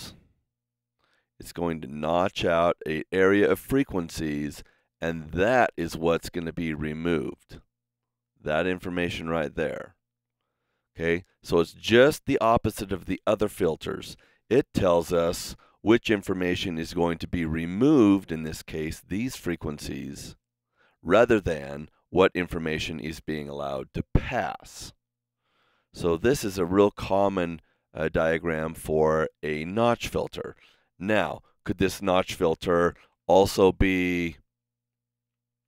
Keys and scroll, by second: 32.9 super+z.